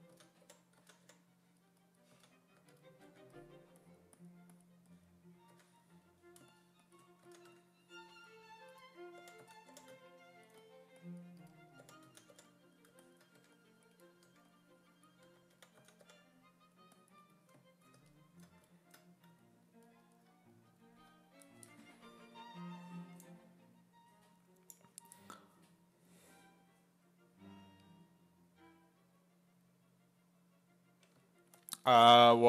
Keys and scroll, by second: 0.0-3.5 typing, 5.5 1, 7.3 s, 7.5 1, 9.0-10.2 typing, 11.6-14.3 typing, 15.3-16.6 typing, 31.2 s.